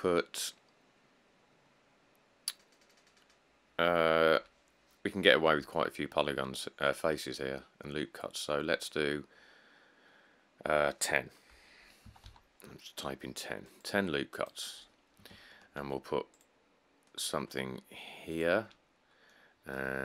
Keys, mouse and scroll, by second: 1.8-2.3 scroll, 7.8 scroll, 8.4 scroll, 9.3 middle click, 12.3 typing, 15.9 ctrl+r, 18.9-19.3 scroll.